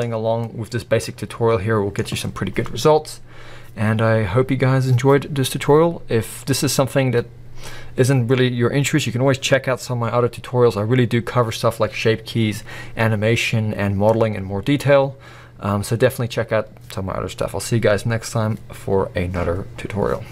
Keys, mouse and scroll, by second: 0.0 scroll up 1, 0.5-20.3 middle drag.